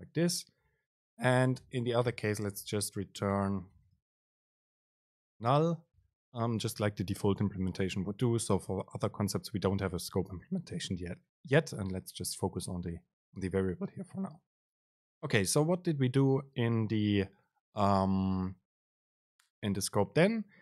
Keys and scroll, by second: 1.7 BackSpace, 2.1 Return, 3.6 BackSpace, 5.6 Up.